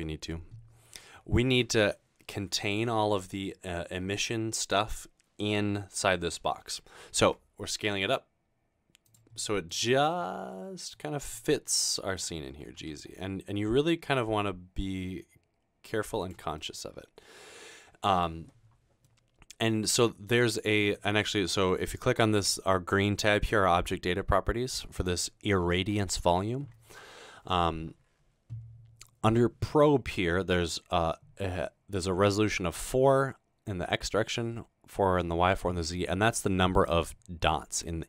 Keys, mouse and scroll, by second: 7.4 s, 9.1 click, 9.4-9.7 middle drag, 10.0-10.8 scroll down 1, 11.9-13.4 typing, 16.2 click, 16.6-18.3 middle drag, 18.3-18.8 scroll down 1, 25.0 click, 35.9-36.5 middle drag.